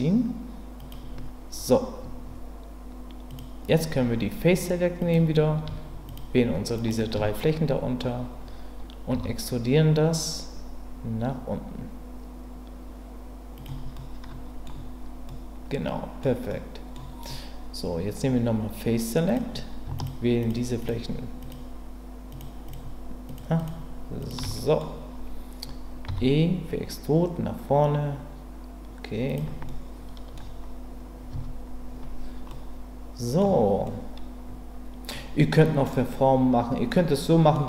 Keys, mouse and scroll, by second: 0.8 click, 3.3 click, 5.0 click, 6.1 shift+click, 6.7 shift+click, 7.4 middle click, 9.1 e, 13.6 click, 13.9 middle click, 15.3 middle click, 16.5 middle click, 19.3 click, 20.0 shift+click, 20.4 shift+click, 21.4 shift+click, 22.3 shift+click, 22.7 shift+click, 23.2 shift+click, 23.6 shift+click, 24.2 shift+click, 24.5 middle click, 26.1 e, 29.3 click, 29.7 middle click, 31.3 Tab, 32.5-33.4 middle drag, 33.8-35.1 middle drag, 35.6 middle click, 36.9-37.5 middle drag.